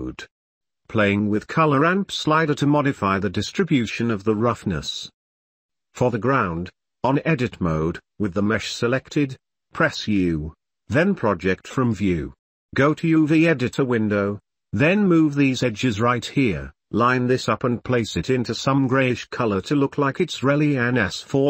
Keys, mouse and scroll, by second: 0.3 click, 1.1-2.5 drag, 3.4-4.6 drag, 4.9 ctrl+s, 7.4 u, 10.2 r, 12.5 shift+click, 12.9-16.9 typing, 17.4 Delete, 17.5 click, 18.1 click, 18.4 g, 19.2 shift+click, 19.3 shift+middle click, 19.6-21.0 typing, 20.0 click, 21.2 Tab, 21.2-21.4 middle drag.